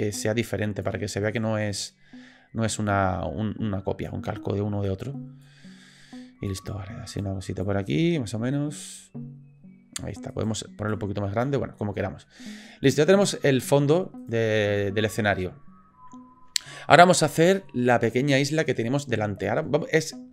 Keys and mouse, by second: 1.2 click, 1.9-4.1 drag, 4.9 click, 5.4-6.5 drag, 7.1 click, 7.7-8.9 drag, 10.3 click, 10.9 click, 11.7 middle click, 13.0 click, 13.8 middle click, 14.2 click, 15.4-16.6 middle drag, 16.9 middle click, 17.4 shift+middle drag, 17.8 middle drag, 18.5 shift+middle drag.